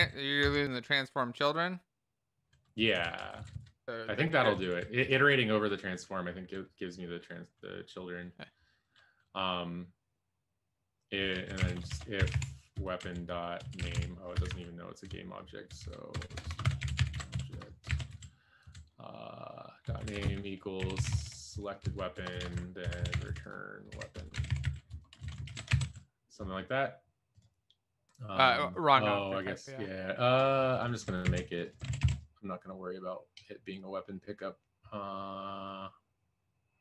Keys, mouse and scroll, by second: 2.8 Up, 2.9 End, 3.2 Left, 3.3 Left, 3.5 Left, 4.4 Down, 4.7 Down, 5.0 Up, 11.9-13.9 typing, 14.3 Escape, 14.4 Up, 15.0 Left, 15.6 Left, 16.1-17.8 typing, 18.0 ctrl+s, 18.1 Down, 18.6 Left, 19.9-25.4 typing, 22.1 Right, 25.4 alt+shift+f, 25.8 ctrl+s, 25.8 Down, 31.4 ctrl+c, 32.0 ctrl+s.